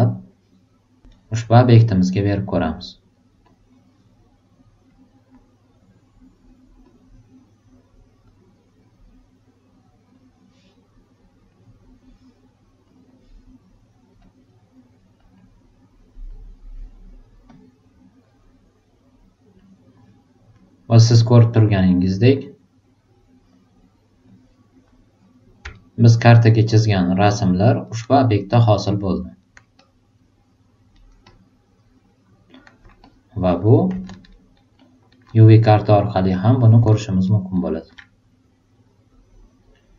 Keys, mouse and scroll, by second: 1.1-3.1 right drag, 3.4 click, 4.8 click, 6.8 super+click, 8.2 super+click, 10.1 super+click, 12.8 click, 14.2 click, 15.2 click, 15.3 click, 16.2 click, 17.4 super+click, 19.6 super+click, 21.3 super+click, 23.0-24.2 super+drag, 25.7 alt+super+right click, 26.1 alt+super+middle click, 26.5 alt+super+right click, 27.0 alt+super+click, 27.8 alt+super+right click, 28.2 alt+super+click, 29.4 alt+right click, 29.8 alt+click, 30.9 alt+right click, 31.2-32.6 alt+drag, 33.0 click, 34.3 alt+right click, 34.7 alt+super+middle click, 36.3 super+click, 37.2 alt+super+right click, 39.3 super+click.